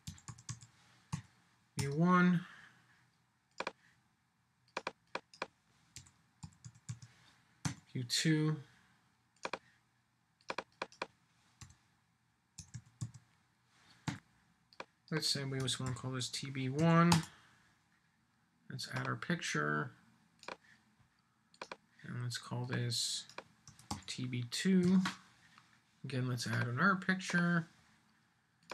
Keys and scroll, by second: 1.8 Return, 17.1 Return.